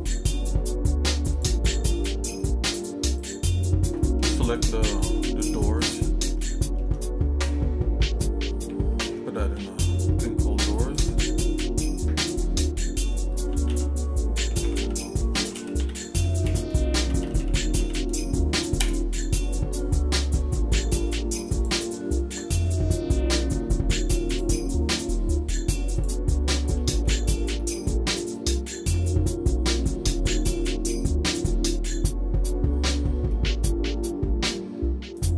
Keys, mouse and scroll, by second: 1.4 click, 3.3 click, 4.0 middle click, 4.5 click, 5.4 shift+click, 5.9 shift+click, 6.5 shift+middle click, 9.5 m, 17.4 o, 24.4 click, 26.0 click, 26.5 middle click, 27.0 shift+middle click, 27.6 middle click, 28.3 click, 29.0 shift+middle click, 30.1 middle click, 30.6-33.1 shift+middle drag, 33.3-34.5 shift+middle drag, 34.7 scroll up 2, 35.1 click.